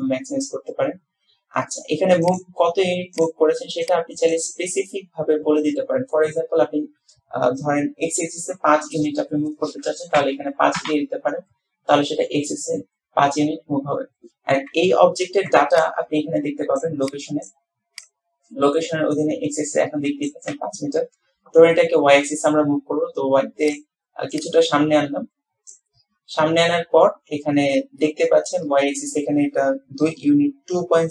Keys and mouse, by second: 2.3-11.0 drag, 23.8 click, 24.5-25.9 drag.